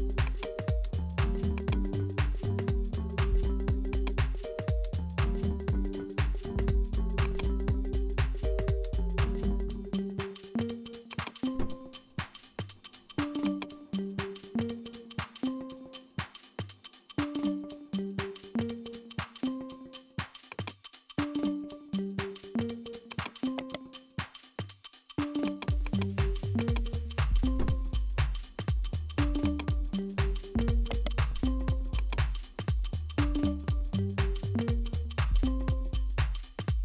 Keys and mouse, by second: 2.2 click, 2.9 s, 4.3 g, 8.9 s, 11.6 g, 14.3-16.6 drag, 16.7-18.2 drag, 18.2 g, 21.2 g, 23.6 right click, 24.4-25.6 drag, 26.6 click, 27.3-29.5 drag, 30.9 right click, 31.4 x, 32.8 a, 33.9 ctrl+b.